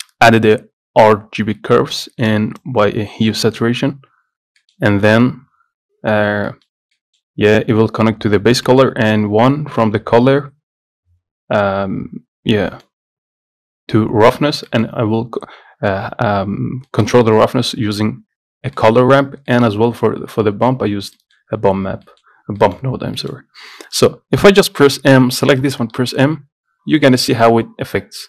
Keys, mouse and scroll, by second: 4.0-27.2 drag, 27.2 scroll up 2, 27.4-28.2 middle drag.